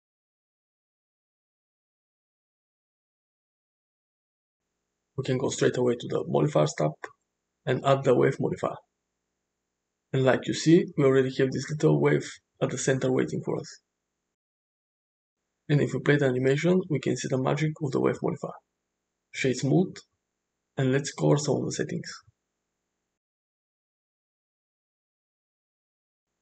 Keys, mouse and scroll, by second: 2.0-2.9 middle drag, 3.4 Tab, 4.1 middle click, 7.6-9.9 drag, 13.3 click, 16.0 space, 17.6 middle click, 18.7 right click, 20.4-20.8 middle drag.